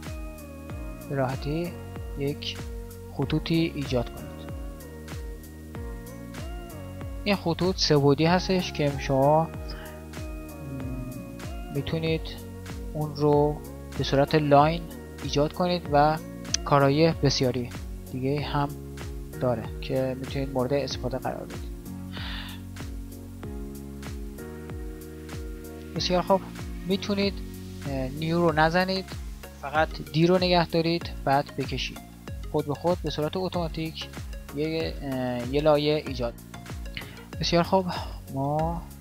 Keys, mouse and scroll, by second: 6.6 d, 23.2 KP_1, 30.3-32.9 d, 36.2-39.0 middle drag.